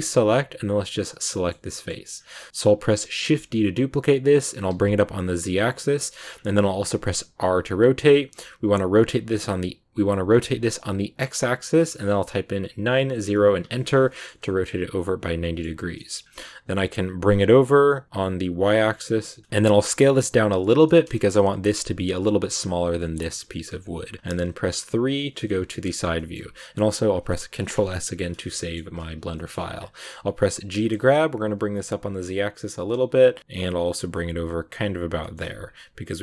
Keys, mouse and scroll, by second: 0.9 right click, 1.6 scroll up 1, 1.6 middle click, 2.5 right click, 3.2 shift+d, 6.2 scroll up 2, 7.3 r, 14.0 middle click, 14.2 scroll down 2, 14.3-16.1 middle drag, 16.1-17.3 scroll up 1, 17.3 g, 19.4 middle click, 19.6 s, 20.8 middle click, 21.4 g, 22.9 scroll up 1, 22.9-24.8 middle drag, 24.8 KP_3, 25.7 click, 26.1-27.5 shift+middle drag, 27.5 ctrl+s, 28.2 click, 28.5-29.6 shift+middle drag, 29.6-30.7 scroll down 1, 30.7 g, 35.1 shift+middle click, 35.3 g.